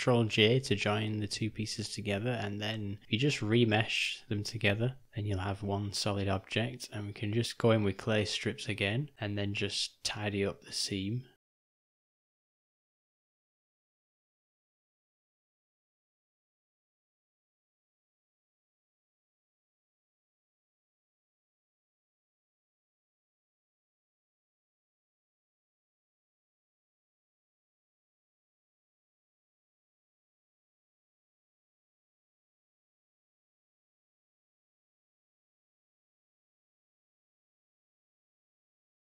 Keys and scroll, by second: 3.0 g, 4.0 d, 5.1 u, 9.7 [, 9.8 [, 21.5 ], 21.7 ].